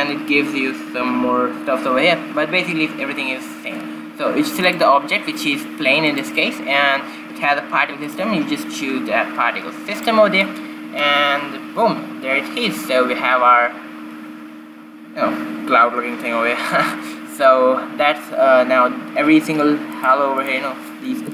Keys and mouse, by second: 5.2-7.0 drag, 8.6-10.3 drag, 20.5-21.3 drag.